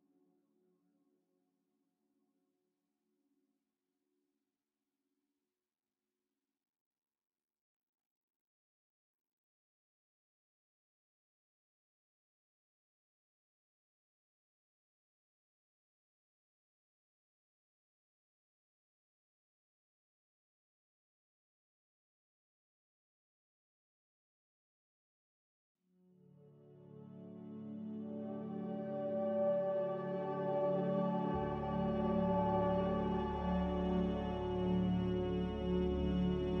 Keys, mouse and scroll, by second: 9.1 ctrl+c, 9.5 ctrl+r, 10.9 a, 11.5 ctrl+c, 11.9 ctrl+r, 21.5 m, 28.4 Escape.